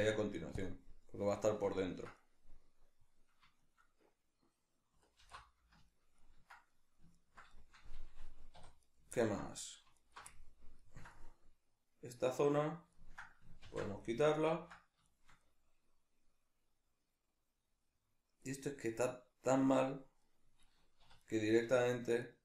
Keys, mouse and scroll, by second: 0.0 x, 5.2 alt+h, 8.5 2, 8.8 right click, 9.1-10.0 ctrl+middle drag, 10.0 alt+right click, 10.3-21.2 ctrl+middle drag, 13.7 ctrl+x, 21.0 3, 21.2 right click, 22.3 shift+right click.